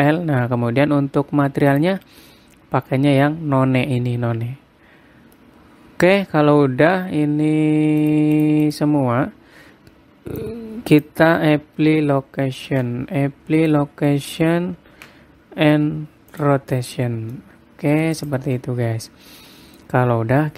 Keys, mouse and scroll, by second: 2.3 click, 2.7-3.5 scroll down 5, 3.5-4.5 scroll down 1, 5.1 scroll up 1, 6.0 middle click, 7.0 scroll up 1, 8.7 click, 9.0 click, 9.4 click, 11.0 click, 13.3 ctrl+a, 15.5 ctrl+a, 17.7-18.1 scroll down 3, 17.9 middle click, 18.8 click, 19.2 middle click.